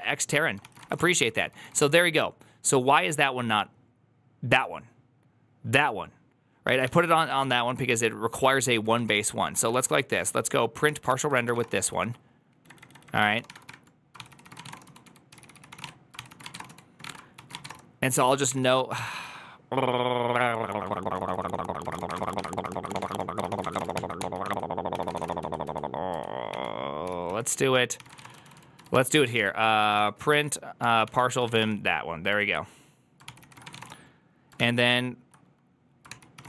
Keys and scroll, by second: 0.5-2.1 typing, 6.8 ctrl+c, 6.9-19.0 typing, 20.7-25.5 typing, 22.5 ctrl+c, 24.0 ctrl+h, 24.3 ctrl+t, 27.5 ctrl+n, 27.5 ctrl+h, 27.8-34.1 typing, 34.4 ctrl+t, 34.7 ctrl+n, 36.0 ctrl+h, 36.1-36.4 typing.